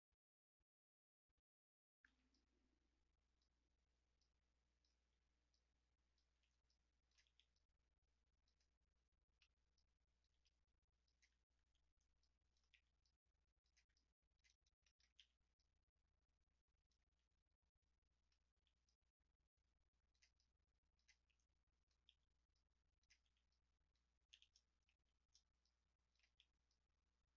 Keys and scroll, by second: 2.0 w, 5.0 r, 6.3 w, 7.2 r, 10.3 w, 11.6 w, 12.7 r, 15.2 w, 17.0 w, 18.5 r, 21.1 w, 22.0 r, 23.2 w, 24.3 e, 24.8 w, 26.2 r.